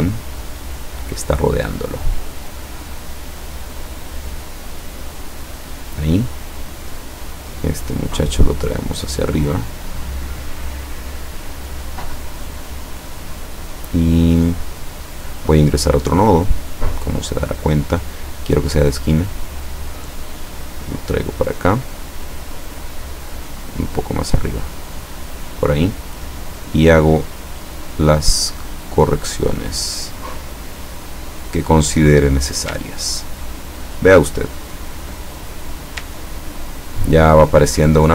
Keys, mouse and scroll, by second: 2.0-3.2 drag, 3.9-6.1 drag, 7.3 click, 8.1-9.9 drag, 10.0 click, 15.9 click, 17.1-18.1 drag, 18.8 click, 19.9-23.1 drag, 23.8-25.5 drag, 26.2-28.1 drag, 28.9-32.2 drag, 33.0-33.6 ctrl+scroll down 2, 35.1 ctrl+click, 36.0-36.7 scroll down 3, 37.3 ctrl+scroll up 1.